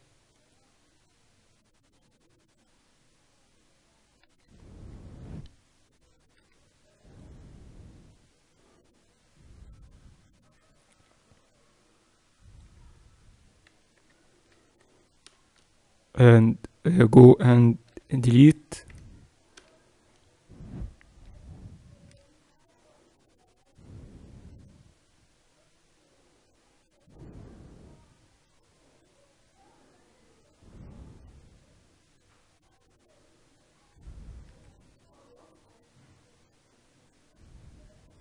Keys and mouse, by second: 4.4 a, 4.8 a, 6.2 c, 17.8 x, 21.0-22.0 middle drag, 22.0 c.